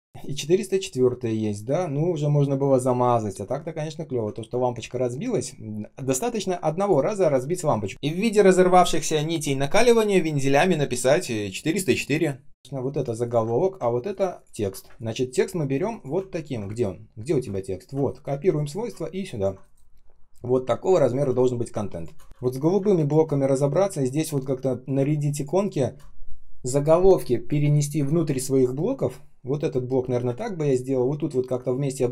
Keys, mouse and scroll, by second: 0.4 ctrl+scroll up 1, 0.6-1.3 ctrl+scroll down 1, 1.3-2.4 ctrl+scroll up 1, 3.3 ctrl+scroll down 1, 4.4 ctrl+scroll up 1, 5.1-5.8 ctrl+scroll down 1, 5.8-6.4 ctrl+scroll up 1, 7.4 ctrl+scroll down 1, 13.0 ctrl+click, 13.1 ctrl+click, 14.0 ctrl+click, 14.3 ctrl+click, 14.5 ctrl+scroll down 1, 14.8 space, 15.3 space, 15.3 space, 16.2 ctrl+click, 16.6 space, 17.1 space, 17.1 space, 17.7 ctrl+click, 18.0 ctrl+alt+c, 18.2 space, 18.7 space, 18.7 space, 18.9 ctrl+scroll up 1, 19.6 ctrl+alt+м, 20.9 ctrl+scroll down 1, 21.2 space, 21.7 space, 21.8 space, 23.2 ctrl+scroll up 1, 24.9 space, 25.4 space, 30.2 space, 30.7 space.